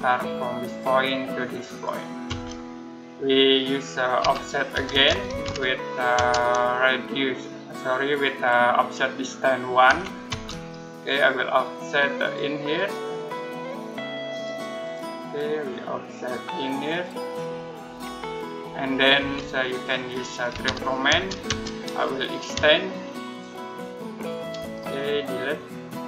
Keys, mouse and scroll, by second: 0.5 click, 2.1 space, 4.0-6.0 typing, 9.7 1, 10.1 space, 10.5-12.0 scroll up 1, 12.1 click, 19.0 space, 19.5-19.9 scroll up 1, 20.3-21.0 typing, 21.7-22.4 scroll up 1, 23.1 shift+click, 24.1 shift+click, 24.5-24.8 scroll up 1, 25.9 click.